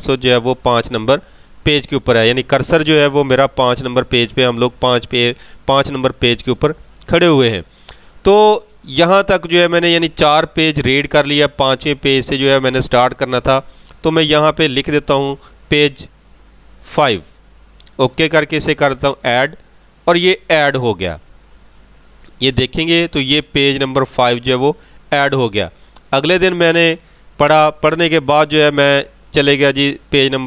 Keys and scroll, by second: 28.3 ctrl+g.